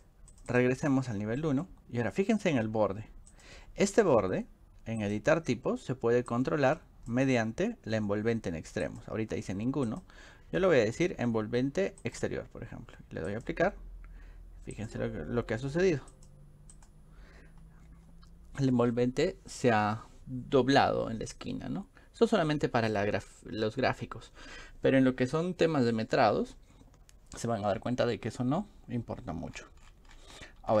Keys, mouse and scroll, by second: 0.3 click, 0.5 click, 1.4 middle click, 3.3 click, 5.0 click, 6.3 click, 8.8 click, 9.9 click, 12.1 click, 13.3 click, 14.8 click, 16.2 click, 16.7 click, 29.2-30.8 scroll up 4.